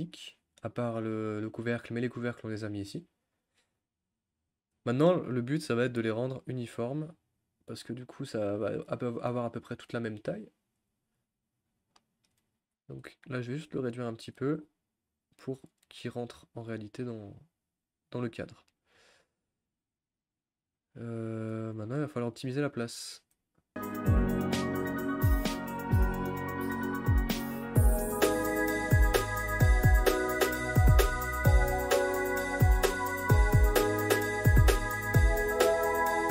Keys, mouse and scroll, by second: 0.0 scroll up 1, 0.1-3.3 middle drag, 3.3 scroll down 1, 6.5 click, 8.9-12.9 shift+middle drag, 12.9 s, 14.7 g, 23.1 r, 24.1 g, 25.1 click, 25.2 g, 25.3 click, 26.9 click, 27.1-30.4 typing, 27.7 click, 27.8 click, 28.6 click, 29.1 click, 30.1 click, 30.3 click, 30.5 click, 30.8 ctrl+z, 31.3 click, 31.4 g, 31.7 click, 32.0 click, 32.2 click, 32.3 r, 32.8 g, 33.3 click, 33.6 ctrl+z, 33.7 ctrl+z, 33.9 click, 34.0-36.3 typing, 34.6 click, 35.7 click, 36.2 click.